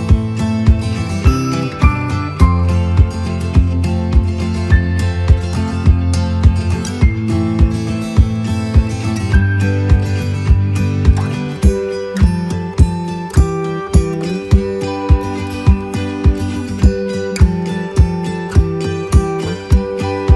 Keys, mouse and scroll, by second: 3.8 click, 5.8 click, 7.0 click, 9.2 click, 15.0 click.